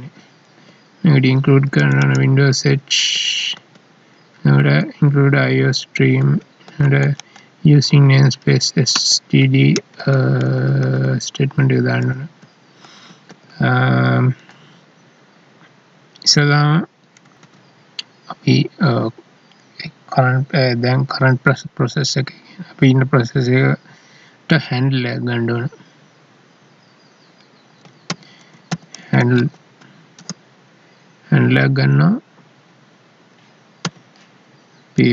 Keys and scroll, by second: 3.5 Down, 6.2 Down, 8.9 End, 9.8 Down, 13.1 ctrl+s, 17.5 alt+e, 30.2 space.